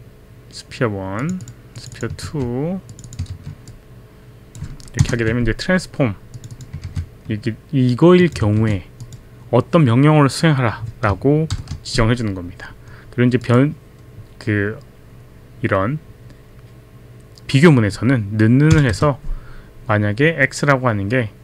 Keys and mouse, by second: 1.2 click, 1.4 click, 1.8 click, 2.2 ctrl+c, 2.4 ctrl+c, 2.9 click, 3.1 click, 3.3 ctrl+v, 3.8 ctrl+v, 3.8 click, 5.1 ctrl+Return, 6.4 click, 6.8 ctrl+c, 8.2 click, 8.6 ctrl+v, 8.6 click, 9.0 click, 11.5 shift+0, 13.4 click, 18.9 space.